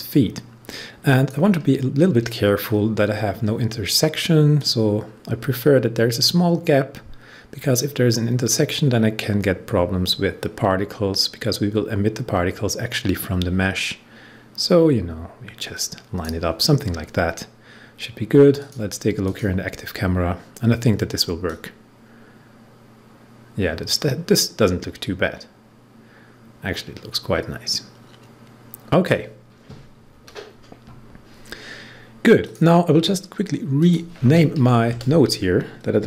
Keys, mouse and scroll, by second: 1.6-2.5 scroll up 1, 4.5-14.5 drag, 18.5 click, 20.1-21.4 scroll down 1, 21.4-31.4 drag, 32.3 click, 32.5 click, 34.8 Return, 35.9-36.0 typing.